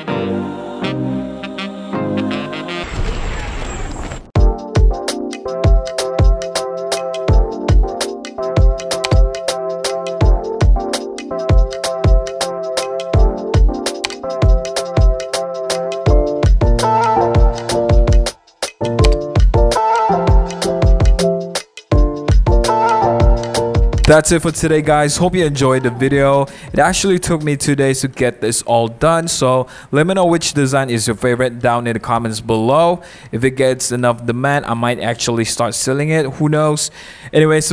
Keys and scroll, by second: 0.2 shift+Page_Up, 0.4 shift+Page_Up, 0.4 super+0, 0.4 super+-, 0.7 super+=, 2.1 super+0, 2.2 super+-.